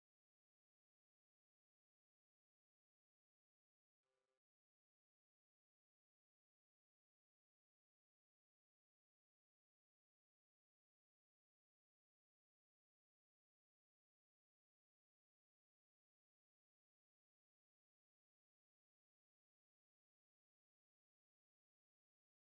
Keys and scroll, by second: 0.2 ctrl+space, 16.6 ctrl+space, 21.9 ctrl+space.